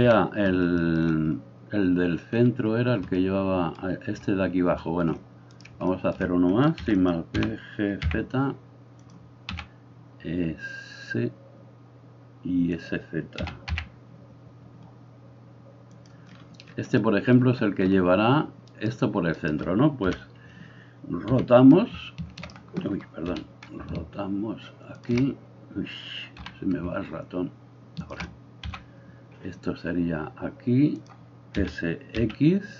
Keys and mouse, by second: 0.1 KP_1, 6.8 shift+d, 7.1-18.8 middle drag, 7.4 g, 9.6 s, 13.5 s, 18.8-20.1 right drag, 20.1-32.7 middle drag, 20.1 KP_1, 21.4 r, 23.9 ctrl+r, 26.5 r, 28.6 g, 31.6 s.